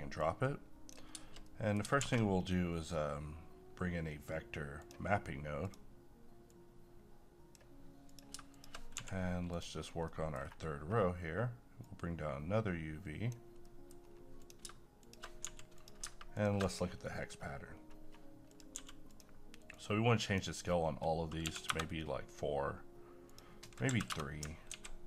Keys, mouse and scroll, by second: 0.2 click, 1.5 middle click, 2.0 shift+a, 4.7-8.1 drag, 8.9 g, 9.5 click, 9.8 scroll down 1, 10.1 middle click, 10.3 scroll down 1, 11.8-13.6 drag, 13.6 middle click, 14.0-14.4 scroll up 1, 14.4 click, 15.0 shift+click, 15.4 g, 15.7 click, 16.9 scroll up 1, 18.5 click, 18.7 g, 19.1-23.3 drag, 24.7-25.0 typing.